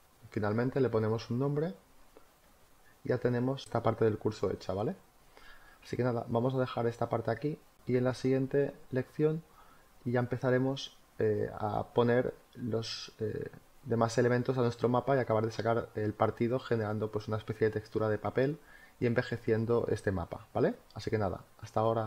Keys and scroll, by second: 14.2 space.